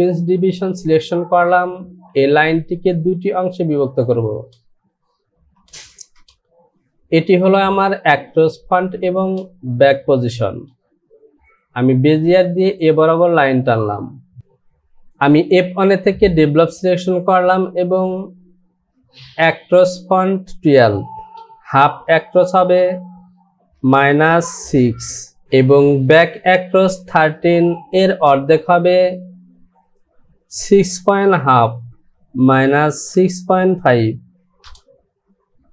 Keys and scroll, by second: 6.1 Return, 23.8 KP_Subtract, 25.1 KP_6, 25.4 Return, 32.5 KP_Subtract, 34.6 Return.